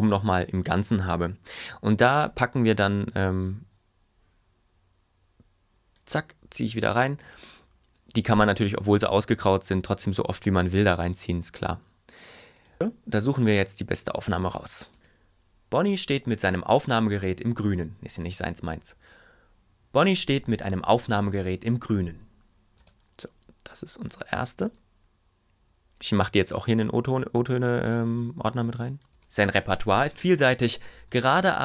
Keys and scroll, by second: 15.0 space, 22.8 space, 29.1 space.